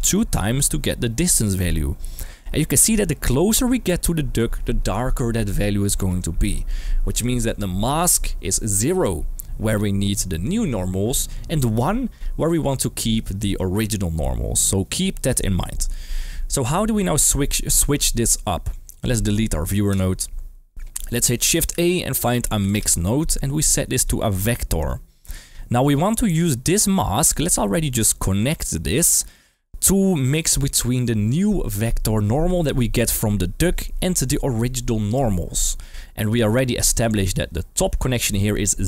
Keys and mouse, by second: 18.9 click, 19.9 Delete, 21.8 shift+a, 23.5 click, 23.9-24.8 drag, 25.2-26.0 drag, 28.2-29.3 drag, 29.6 click, 34.2 click, 38.0 middle drag.